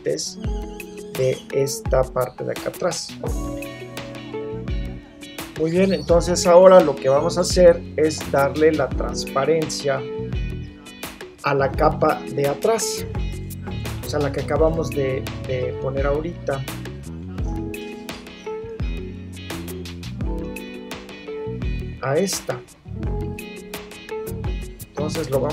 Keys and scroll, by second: 13.7 super+0.